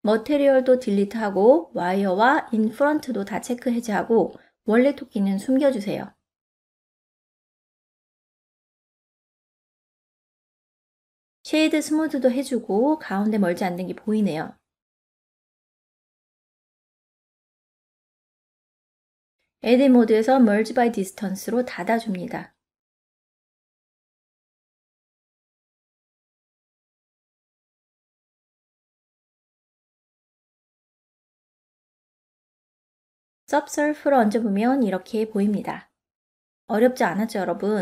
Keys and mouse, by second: 1.0 click, 2.1 middle click, 6.3 click, 7.7 click, 8.8 click, 11.8 click, 12.9 right click, 14.2 middle click, 15.5 Tab, 16.1 ctrl+middle click, 17.5 a, 18.4 1, 20.0 m, 22.2-23.7 drag, 24.9-26.6 middle drag, 27.1 ctrl+Tab, 27.2 ctrl+middle click, 28.0 right click, 28.7-30.5 middle drag, 33.7 ctrl+2, 34.5-37.8 middle drag.